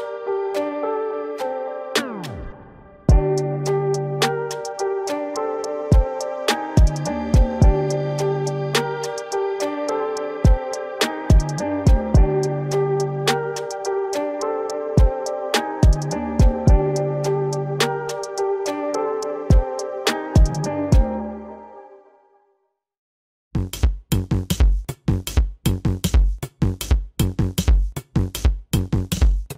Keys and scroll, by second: 3.4 ctrl+=, 5.7 ctrl+=, 5.9 space, 20.6 ctrl+alt+z, 25.8 ctrl+alt+z, 26.7 space, 28.3 space, 28.7 ctrl+alt+z, 29.3 space.